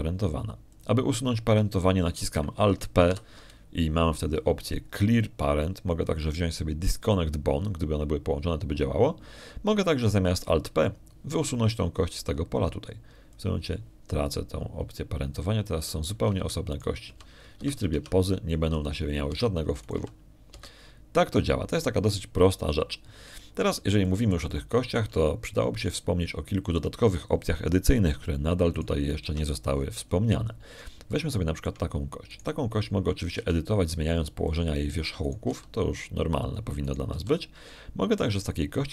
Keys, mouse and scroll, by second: 2.6 click, 4.9 alt+p, 15.2 click, 17.6 g, 18.3 Escape, 18.6 right click, 18.9 g, 19.5 Escape, 19.8 Tab, 20.6 g, 21.1 Escape, 21.7 right click, 21.8 click, 21.8 g, 22.4 Escape, 25.1 middle click, 25.7 shift+middle click, 25.9 shift+click, 27.3 shift+middle click, 27.8 shift+click, 30.6 right click, 31.1 Tab, 31.6 middle click, 32.0 middle click, 32.5 middle click, 32.9 shift+click, 34.1 shift+right click, 35.2 g, 36.3 click, 37.1 right click, 37.3 g, 38.3 click, 38.7 right click.